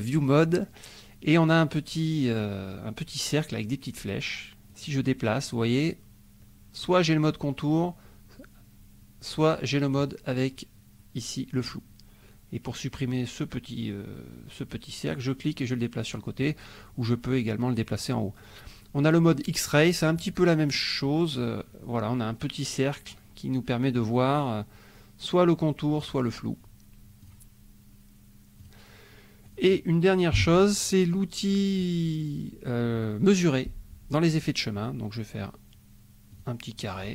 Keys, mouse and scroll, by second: 0.3 click, 4.7-10.1 drag, 12.8 click, 15.2 click, 20.3 click, 21.5 click, 27.2 click, 28.6 click, 29.4 click, 30.3 Delete, 36.3 click, 36.9-37.1 drag.